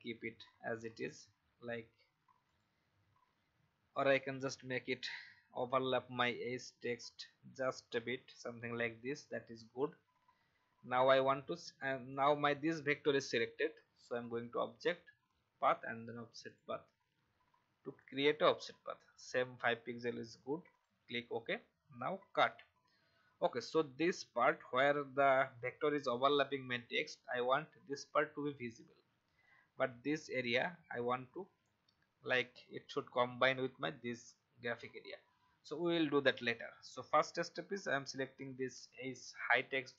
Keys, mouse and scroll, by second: 0.8 alt+scroll up 1, 2.5 click, 4.0 shift+click, 10.3-12.8 scroll down 1, 14.0 click, 22.3 ctrl+x, 23.7-24.2 alt+scroll up 1, 31.5-31.8 alt+scroll up 1, 32.9 alt+scroll down 1, 35.8-37.7 alt+scroll down 1, 37.7 click.